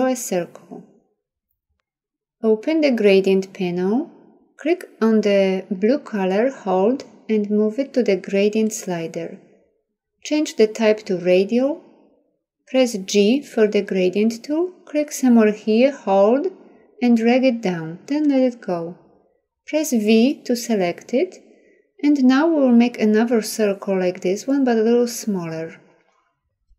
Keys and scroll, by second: 12.3 g, 19.6 v.